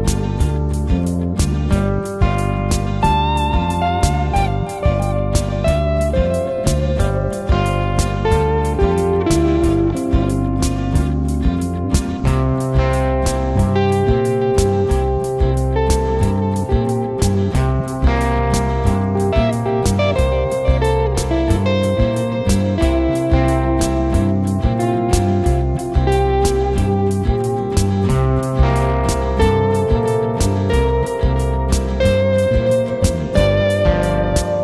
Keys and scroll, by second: 20.3 ctrl+z.